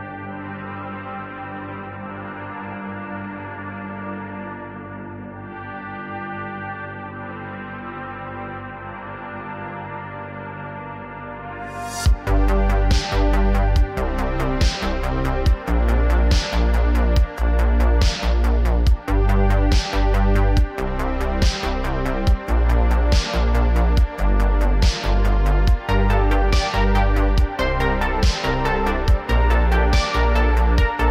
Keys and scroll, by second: 0.0 n, 2.8 space, 4.1 space, 6.3 space, 14.3 space, 18.9 space.